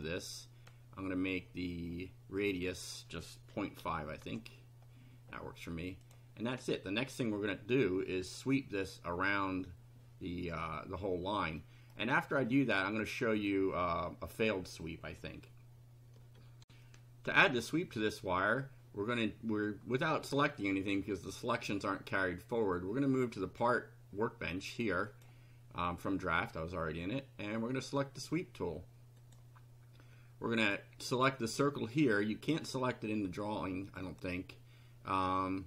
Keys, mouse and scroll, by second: 0.0-0.9 drag, 2.6 click, 3.5 KP_Decimal, 3.8 KP_5, 4.2 KP_Enter, 6.0 click, 11.6-12.1 middle drag, 12.2 middle click, 16.6 ctrl+r, 23.5 click, 25.1 click, 29.2 click, 31.4 click, 34.0 click.